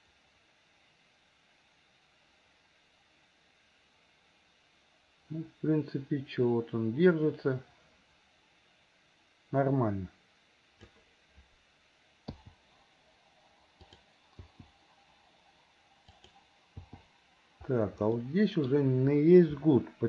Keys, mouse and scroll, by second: 12.4 i, 14.0 click, 14.5 i, 16.2 click, 16.9 i, 18.1 middle click.